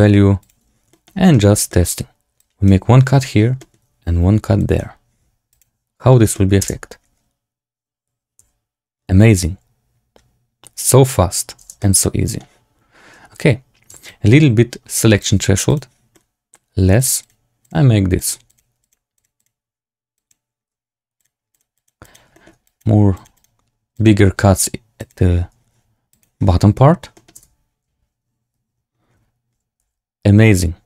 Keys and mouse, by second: 0.5 click, 0.8 shift+middle click, 1.2 middle click, 1.6 shift+middle click, 2.3 click, 3.5 shift+click, 4.5 click, 6.2 shift+drag, 6.5 space, 8.4 z, 11.5 space, 11.7-12.3 middle drag, 14.0-15.2 shift+drag, 15.6 click, 16.0 middle click, 16.9 click, 17.1 click, 18.1 click, 18.4 click, 18.7 click, 19.1 click, 19.3 click, 20.1 click, 21.1 click, 21.4 click, 21.7 click, 21.9 click, 22.2 shift+middle click, 22.6 click, 23.1 click, 23.3 click, 23.9 click, 24.9 click, 27.0 middle click, 27.3 space, 29.8 z.